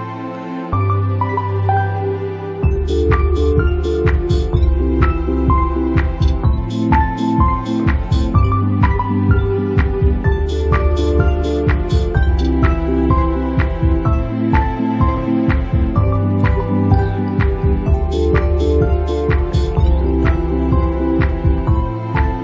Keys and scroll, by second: 4.7 ctrl+z, 11.1 Caps_Lock, 12.0 space, 13.0 space, 14.1 space, 14.7 space, 16.9 ctrl+z, 18.2 space, 19.0 space, 22.0 ctrl+z.